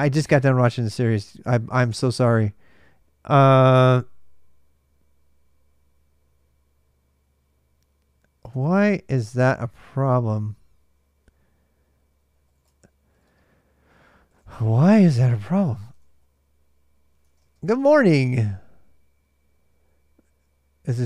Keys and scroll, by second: 0.0 super+Tab, 8.2 super+Tab, 12.0-18.1 typing.